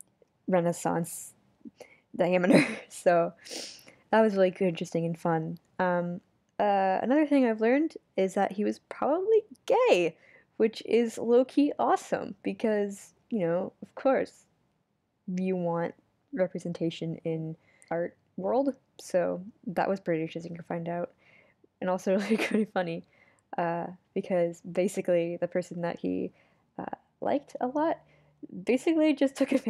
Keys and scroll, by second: 7.9 super+z, 12.5 super+z, 14.2 super+z, 15.3 super+z, 18.8 super+z, 20.6 super+z, 23.0 super+z, 23.6 super+z, 25.5 super+z, 26.2 super+z, 27.2 super+z, 28.8 super+z, 29.3 super+z.